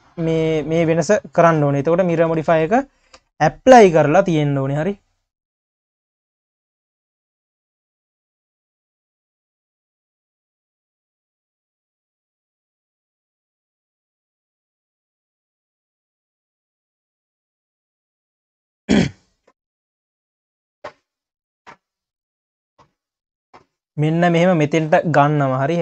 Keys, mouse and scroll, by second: 0.0-1.3 scroll down 2, 1.3 click, 1.8 q, 2.4 ctrl+s, 3.1 KP_3, 4.0-5.0 scroll up 4, 5.0-6.2 drag, 7.2 click, 8.6 click, 9.5 click, 12.7 click, 14.7 click, 15.6 click, 17.6 scroll, 18.3 click, 19.5 click, 21.0 click, 25.1-25.4 scroll down 5.